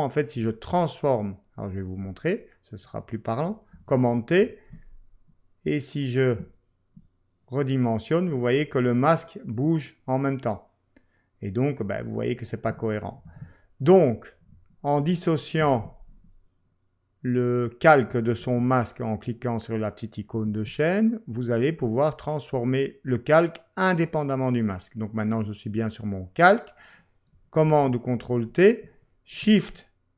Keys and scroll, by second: 3.7 super+t, 13.2 super+z, 15.0 ↺, 18.4 ctrl+q, 27.6 super+t.